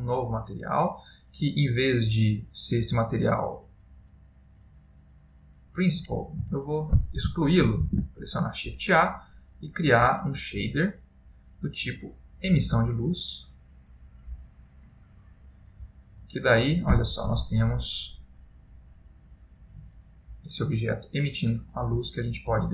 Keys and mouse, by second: 1.2 middle click, 2.3 middle click, 6.2 click, 6.5 x, 8.0 shift+a, 14.5 click, 17.4 middle click, 19.7 middle click.